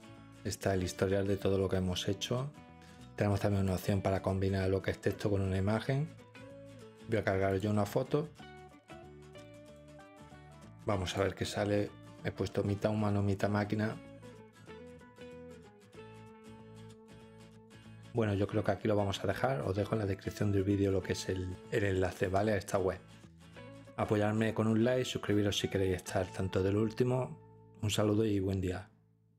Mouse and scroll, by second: 3.7-4.4 drag, 4.4 scroll, 7.5 click, 8.7 click, 9.5 middle click, 9.5 scroll, 11.1-12.1 drag, 22.2-23.2 drag.